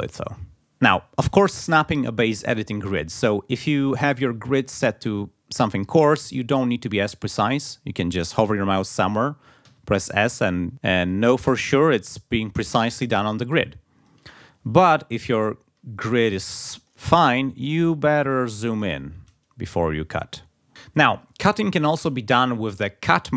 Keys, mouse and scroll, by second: 7.4 click, 9.7 s, 10.7 ctrl+z, 11.0 ctrl+click, 11.5 ctrl+s, 13.6 click, 14.2 ctrl+z, 15.2-16.6 drag, 16.8 click, 17.6-18.2 ctrl+scroll up 4, 18.8 ctrl+scroll down 2.